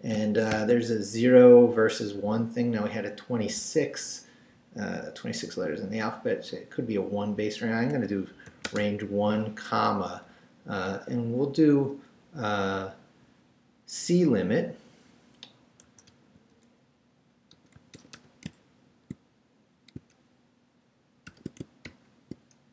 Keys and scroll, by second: 0.0-0.5 typing, 7.9 l, 15.6-18.6 typing, 21.3 shift+0, 21.9 shift+;.